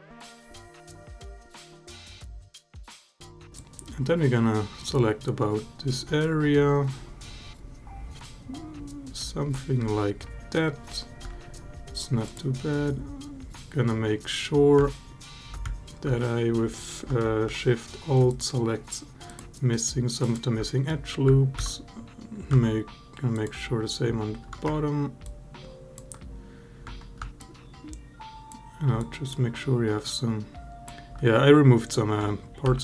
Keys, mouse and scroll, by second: 2.1 alt+middle click, 3.4-9.0 drag, 12.0 click, 18.1 alt+shift+click, 20.0 alt+shift+click, 20.4 alt+middle click, 21.2 scroll down 1, 21.4 alt+click, 25.0 ctrl+click, 27.3 shift+click, 28.8 shift+click, 29.8 shift+click, 32.5 ctrl+z.